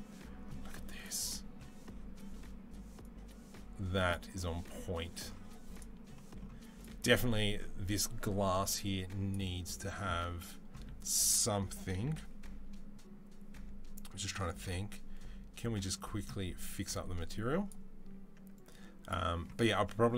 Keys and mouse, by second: 2.8-5.6 drag, 5.6 middle click, 6.6 click, 6.6-8.6 middle drag, 8.6-12.1 drag, 12.0 ctrl+s, 12.1-18.4 right drag, 18.4-20.1 drag.